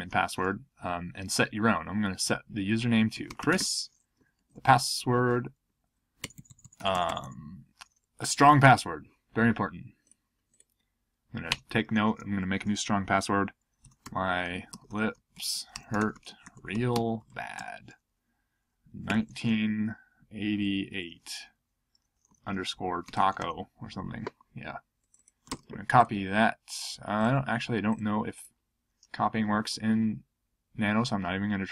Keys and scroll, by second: 2.9-4.1 typing, 4.2 Down, 4.4 Right, 4.5 Right, 5.6 Right, 6.2 BackSpace, 6.3 BackSpace, 6.5 BackSpace, 6.6 BackSpace, 11.5 Return, 13.6-16.9 typing, 18.8-21.1 typing, 22.4-23.8 typing, 25.4 super+c, 31.6-31.7 typing.